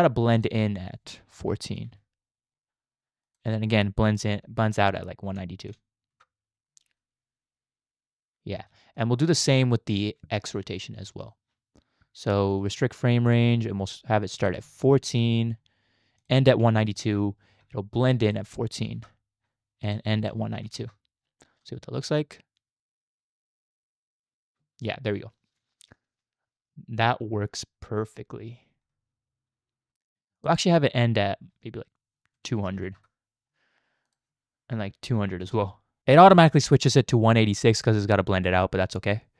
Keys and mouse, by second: 0.5-1.9 drag, 3.4-6.2 drag, 6.9 space, 8.5 space, 9.0 click, 10.9 Right, 11.2 click, 12.5 click, 13.2 click, 14.5 click, 16.2 click, 18.3 click, 19.9 click, 21.6 space, 29.9 space, 30.4-33.0 drag, 32.7 0, 34.2-35.6 drag, 35.3 0.